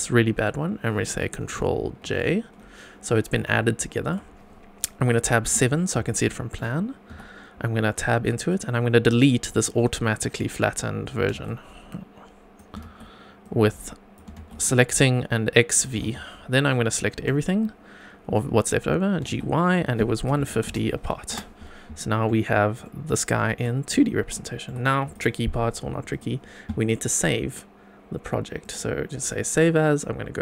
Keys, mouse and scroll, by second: 2.1 ctrl+j, 3.8-4.1 shift+middle drag, 5.4 KP_7, 6.2 shift+middle drag, 7.1 Tab, 8.5 click, 11.1 x, 11.9 click, 12.8 x, 13.4 click, 14.4 x, 14.9 click, 16.0 x, 17.1 a, 19.2 g, 20.3 KP_1, 20.4 KP_5, 20.6 KP_0, 21.3 Return, 21.9 scroll down 3, 22.2 middle click, 22.9 scroll up 2, 23.4 shift+middle click, 23.9 Tab, 24.4 shift+middle click, 25.0 click, 26.1 click, 28.6 click.